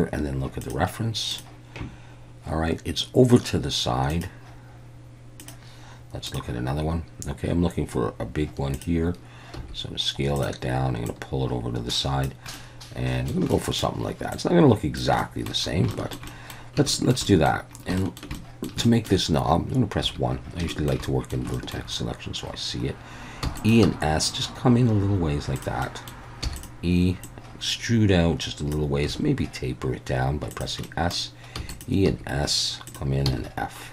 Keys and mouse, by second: 9.6 s, 10.4 click, 11.1-12.2 drag, 12.6 middle click, 13.6 middle click, 14.3 click, 15.2 middle click, 16.0 shift+middle click, 16.3 middle click, 17.0 shift+middle click, 17.3 middle click, 18.1 shift+middle click, 18.4 middle click, 18.9 shift+middle click, 20.0 1, 20.7 shift+middle click, 21.0 middle click, 21.6 shift+middle click, 23.4 e, 23.6 click, 25.6 click, 25.6 s, 25.9 middle click, 26.4 e, 26.6 click, 27.3-28.7 drag, 29.1 s, 30.5 click, 30.9 middle click, 31.6 e, 31.7 click, 32.1 s, 33.3 f.